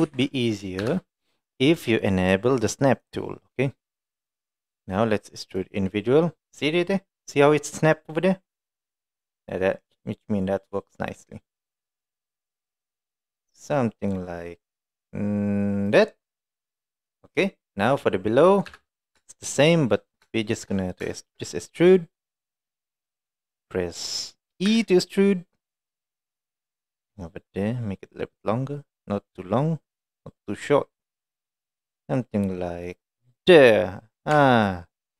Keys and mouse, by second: 0.1 ctrl+z, 0.9 KP_1, 3.0 click, 3.5 middle click, 5.6-16.1 right drag, 16.5 middle click, 18.7 KP_1, 19.5 shift+middle click, 20.5 shift+middle click, 21.1 shift+middle click, 24.7 e, 33.9 middle click, 34.4 Tab, 34.6-35.1 middle drag.